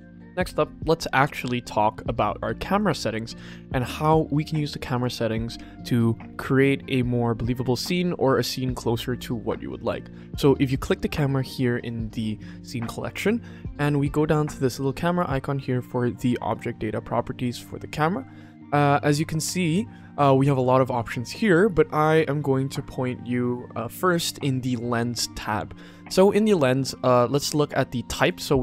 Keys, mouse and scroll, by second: 2.6 click, 10.7 click, 16.4 click, 28.1-28.6 drag.